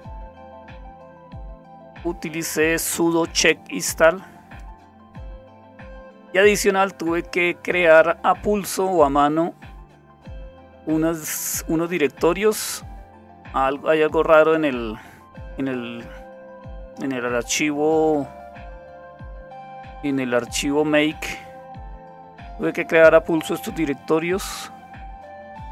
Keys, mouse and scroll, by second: 0.2-3.1 scroll down 1, 3.1-5.2 drag, 5.4-6.7 scroll down 2, 6.7-11.8 scroll down 2, 11.8-15.2 drag, 24.0-24.9 scroll down 2, 24.9-25.7 scroll down 1.